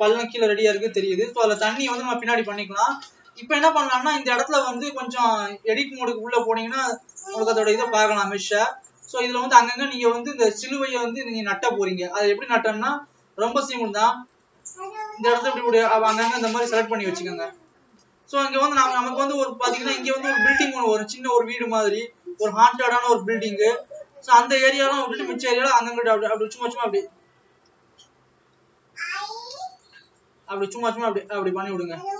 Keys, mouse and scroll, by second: 29.7 click.